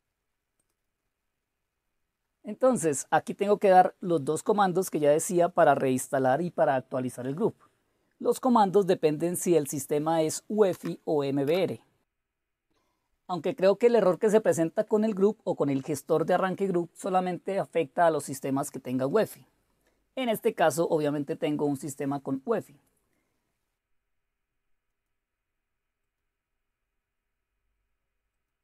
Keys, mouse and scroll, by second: 4.0 click, 4.9 click, 6.4 click, 7.7-9.2 right drag, 9.2-10.4 drag, 10.7 Tab, 11.4 Return, 18.8 click, 20.3-23.7 drag, 25.1 right click, 28.3 click.